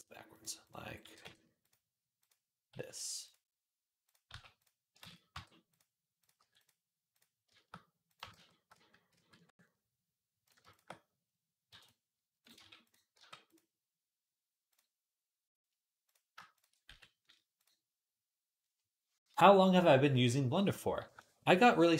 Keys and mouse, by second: 0.9 g, 2.6 x, 4.1 g, 4.9 ctrl+z, 4.9-9.3 drag, 5.2 g, 6.2 g, 8.2 ctrl+z, 8.6 ctrl+z, 9.0 ctrl+z, 11.5 m, 12.5 g, 13.0 g, 13.3-15.9 middle drag, 15.9 click, 16.0 middle click, 16.2 alt+shift+click, 16.5-21.9 middle drag, 16.7 x.